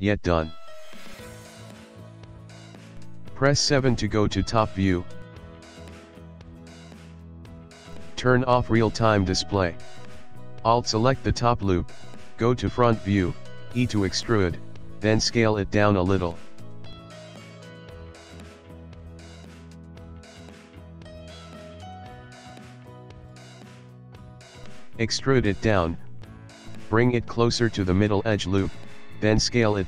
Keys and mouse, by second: 1.3 click, 1.8 middle click, 2.0 middle click, 2.5 middle click, 3.4 middle click, 3.7 middle click, 3.9 KP_7, 4.9 ctrl+middle click, 5.8 Tab, 6.8 middle click, 7.1 middle click, 7.3 ctrl+middle click, 7.5 middle click, 9.1 click, 9.8 middle click, 11.2 alt+click, 11.9 middle click, 14.9 e, 17.7 ctrl+middle click, 18.1 shift+middle click, 18.9 ctrl+middle click, 20.4 s, 22.2 ctrl+middle click, 22.4 s, 23.1 shift+middle click, 23.6 ctrl+middle click, 23.9 shift+middle click, 24.2 shift+middle click, 25.2 e, 28.4 shift+middle click, 28.6 shift+middle click, 29.1 ctrl+middle click, 29.2 ctrl+middle click, 29.5 shift+middle click, 29.7 shift+middle click.